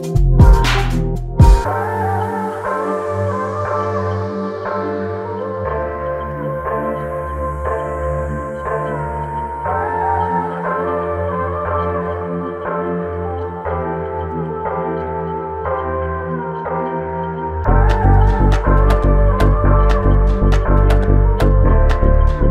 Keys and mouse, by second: 3.2 double click, 5.2 shift+click, 5.6 shift+double click, 6.1 shift+click, 6.9 shift+click, 8.1 ctrl+click, 10.1 shift+click, 11.0 ctrl+alt+click, 13.1 ctrl+click, 14.8 shift+click, 15.7 alt+click, 17.8 alt+click, 17.9 ctrl+click, 20.2 shift+double click, 22.4 shift+click.